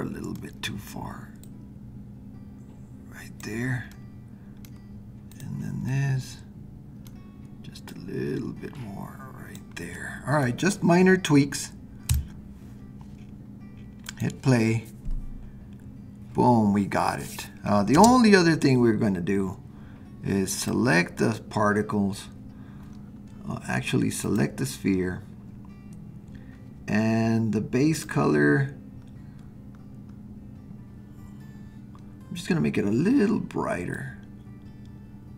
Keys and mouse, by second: 1.6-3.4 drag, 4.0-4.7 middle drag, 5.9-9.5 middle drag, 10.0-10.6 middle drag, 12.1 KP_0, 14.0 click, 18.0 space, 20.6 click, 24.2 click, 34.1-35.3 drag.